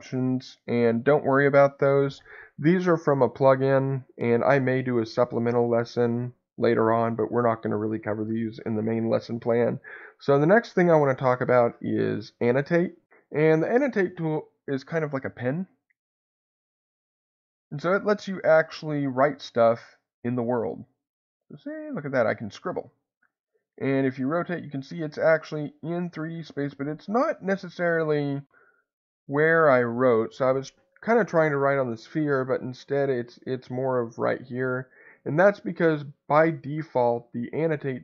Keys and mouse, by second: 16.8 click, 20.2-22.8 drag, 23.2-28.4 middle drag, 32.7 middle click.